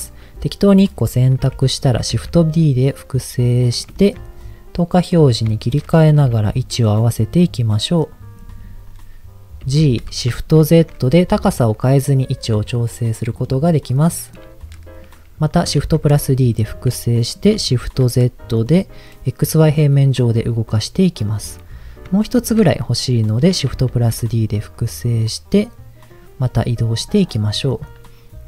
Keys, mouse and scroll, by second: 1.4 KP_1, 2.1 shift+d, 3.6 click, 4.0 shift+middle click, 4.2-4.6 scroll up 3, 5.1 click, 5.6 shift+middle click, 5.8-6.2 scroll up 3, 6.2 g, 6.3 z, 7.4 click, 7.7 middle click, 8.9-9.6 scroll down 3, 9.6 g, 10.6 shift+z, 12.4 click, 13.4 click, 13.9 middle click, 15.8 shift+d, 17.7 shift+z, 21.2 click, 22.4 shift+d, 23.9 shift+z, 26.1 click, 26.7 middle click, 27.0-27.4 scroll down 2, 27.7 click, 27.7 scroll down 2, 28.0-28.4 middle drag.